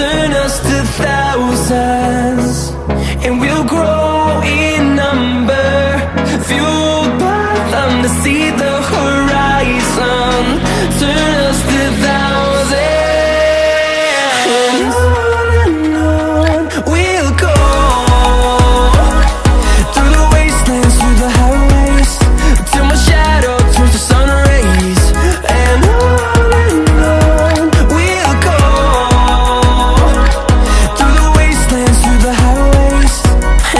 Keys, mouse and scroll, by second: 0.0 click, 0.8 click, 3.2 click, 5.5 click, 7.1 click, 8.2 click, 9.6 middle click, 9.9 middle click, 10.4 middle click, 11.3 click, 11.8 right click, 13.0 click, 14.3 click, 15.2 click, 16.8 middle click, 17.3 middle click, 18.2 middle click, 18.6 scroll down 1, 19.3 scroll down 1, 19.8 scroll, 20.8 Escape, 23.2 middle click, 24.1 click, 26.5 click, 28.7 click, 30.1 click, 32.9 click.